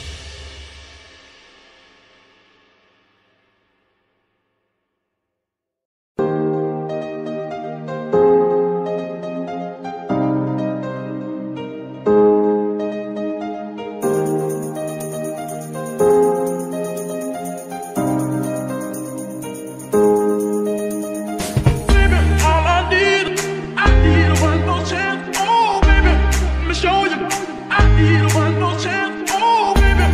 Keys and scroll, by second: 0.6 g, 1.5 Escape, 2.1 g, 3.5 Escape, 5.6 y, 9.7 Escape, 12.3 g, 13.5 Escape, 21.7 d, 23.9 z, 25.6 Escape, 28.5 alt+g.